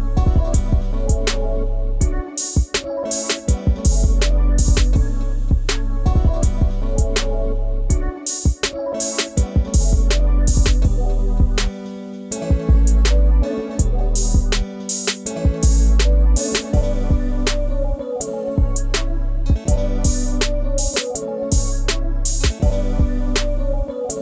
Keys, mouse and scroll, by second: 15.2 double click, 17.8 scroll up 1, 21.2 scroll down 1.